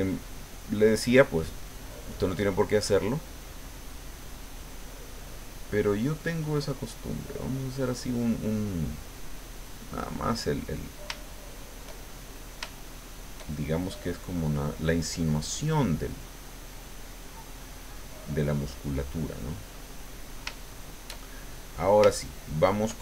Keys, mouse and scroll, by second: 1.1-3.8 drag, 3.9 click, 4.6 click, 6.4-8.0 drag, 8.2-10.2 drag, 10.6 middle click, 12.3 shift+middle click, 14.1-16.3 drag, 16.7 click, 17.3 click, 17.9 click, 18.6 click, 19.4 middle click, 19.9 click, 19.9 middle click, 20.5 shift+middle click, 21.6 middle click.